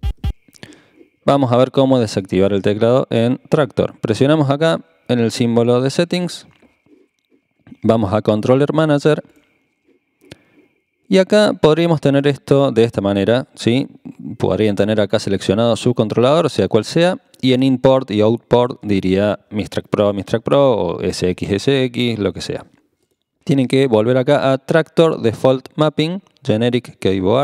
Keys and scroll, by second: 0.0-0.2 typing.